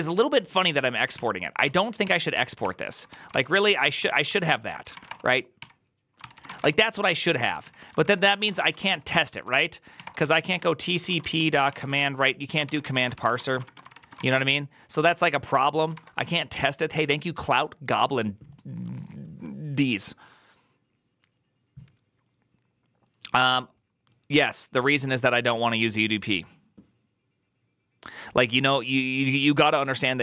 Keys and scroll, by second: 0.0-14.6 typing, 3.1 ctrl+c, 6.1 ctrl+c, 6.5 Return, 7.9 ctrl+c, 8.7 ctrl+c, 14.8 ctrl+u.